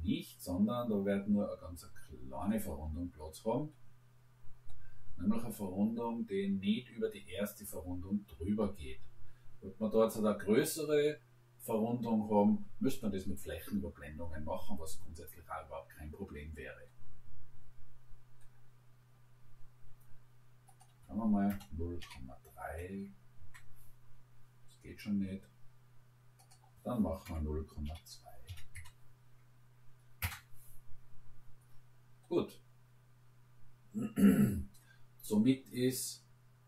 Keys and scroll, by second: 21.5 0, 22.0 ., 22.7 3, 23.4 Return, 27.4 0, 27.9 ., 28.5 2, 28.8 Return, 30.2 Return.